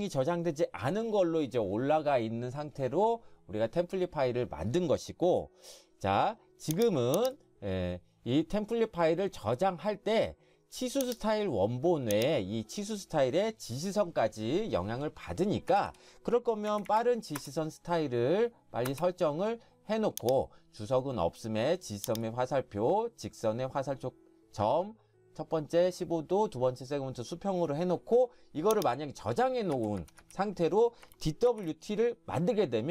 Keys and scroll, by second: 15.7 Escape, 15.9 Escape, 16.7-17.4 typing, 29.0 typing, 29.8 Escape, 30.0 Escape, 30.2 Escape, 31.5 ctrl+shift+s.